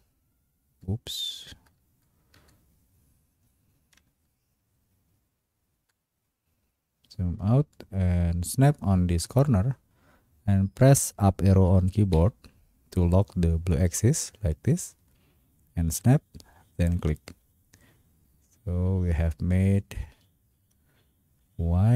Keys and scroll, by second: 12.1 Up.